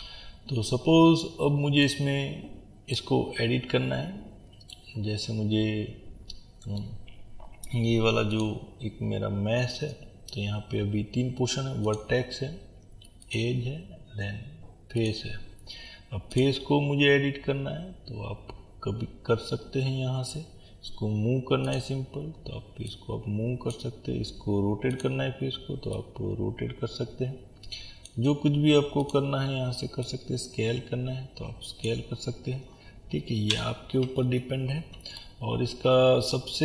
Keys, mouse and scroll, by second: 3.2-4.2 scroll up 2, 4.2 middle click, 4.2-4.7 scroll down 2, 4.7-8.4 middle drag, 8.4 click, 11.8-16.4 drag, 21.8-29.4 drag, 30.2 click, 32.1 scroll down 1, 34.3 ctrl+z, 35.2-36.6 middle drag.